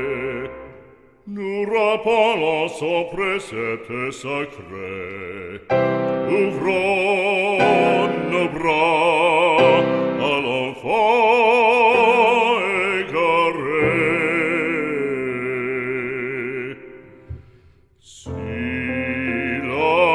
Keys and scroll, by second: 4.4 ctrl+-.